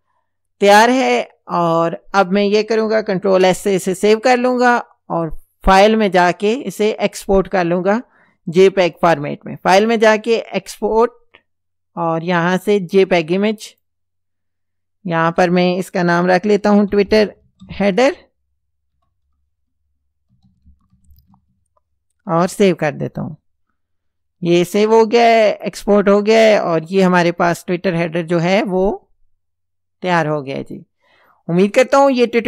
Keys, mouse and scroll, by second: 3.3 ctrl+s, 9.0 click, 13.7 click, 16.4-21.8 typing, 22.3 Return, 25.6 click, 26.8 click, 30.1-31.0 drag.